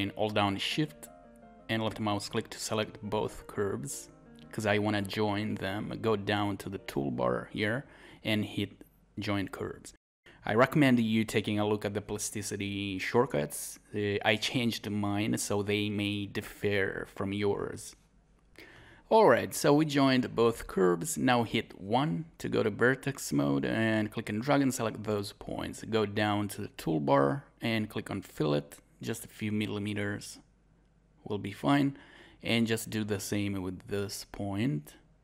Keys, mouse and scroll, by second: 21.9 scroll up 1, 22.6 click, 22.6 scroll up 1, 30.9-31.4 scroll down 1, 31.8 scroll up 1.